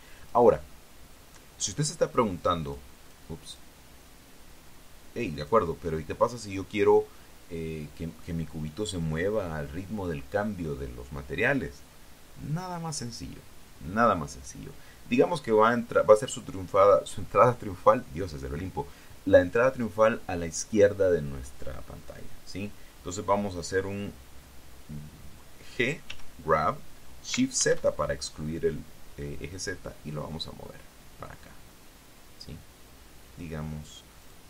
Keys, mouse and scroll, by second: 1.0 click, 2.9 click, 3.2 middle click, 3.9 click, 4.3 click, 6.1 click, 7.3 scroll down 1, 26.9 g, 28.4 shift+z.